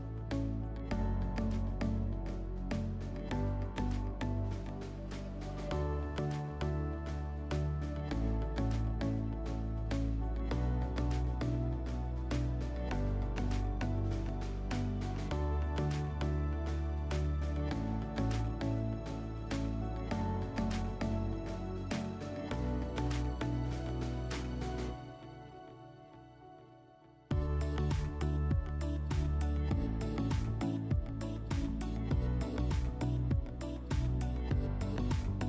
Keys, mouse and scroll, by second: 9.1 click, 9.6-11.1 typing, 10.6 click, 15.9-17.5 drag, 30.4 click, 32.4 click, 33.8 click, 34.3 click.